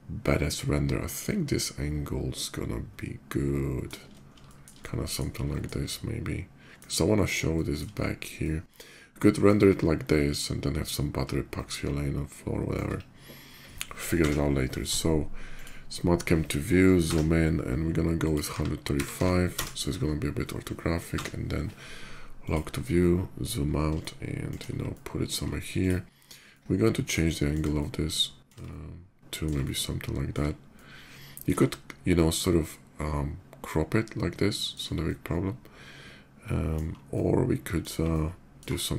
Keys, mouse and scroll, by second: 4.2 shift+middle drag, 4.5-4.9 shift+middle drag, 5.2 shift+middle drag, 5.6-6.5 shift+middle drag, 7.3 shift+middle click, 7.7 shift+middle drag, 8.2-9.2 shift+middle drag, 11.1-12.5 middle drag, 13.8 Page_Down, 15.3 click, 17.9 click, 18.3 1, 18.9 3, 18.9 5, 19.1 1, 19.3 Return, 19.8 middle click, 20.9 Page_Down, 22.2 click, 22.4 middle click, 22.7-24.2 middle drag, 24.7 ctrl+middle click, 25.4 ctrl+click, 26.3-27.3 ctrl+middle drag, 27.5-28.2 shift+middle drag, 28.4-29.2 ctrl+middle drag, 29.4-30.1 shift+middle drag, 30.5-31.2 ctrl+middle drag, 31.4-34.5 ctrl+shift+middle drag, 34.8-36.5 ctrl+middle drag, 36.8-37.5 ctrl+middle drag, 37.9-38.3 ctrl+middle drag, 38.5-38.9 shift+middle drag.